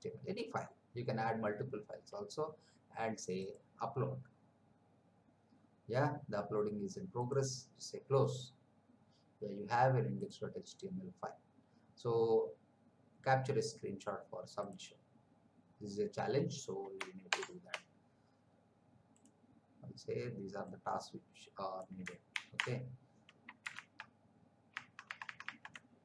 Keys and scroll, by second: 17.3 shift+Print, 22.3 ctrl+c, 23.9 alt+Tab.